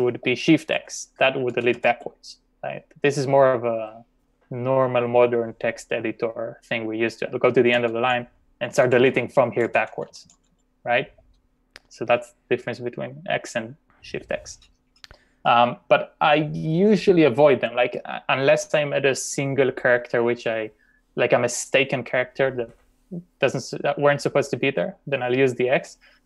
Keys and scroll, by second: 0.8-1.2 typing, 7.8-8.9 typing.